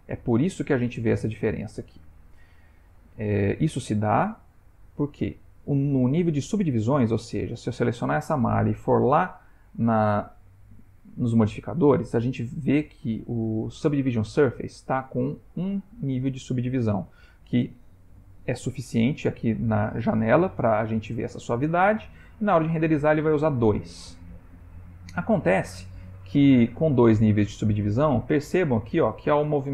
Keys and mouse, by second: 0.5 click, 1.1 click, 1.9 click, 4.5 click, 8.6 click, 25.7 click, 26.8 click, 27.4 r.